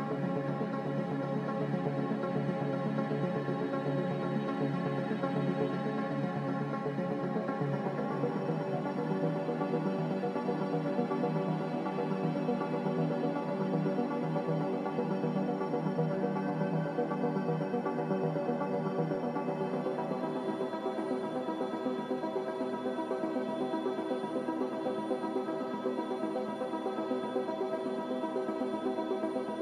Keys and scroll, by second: 3.2 Return, 6.4-7.1 typing, 18.3-19.1 typing.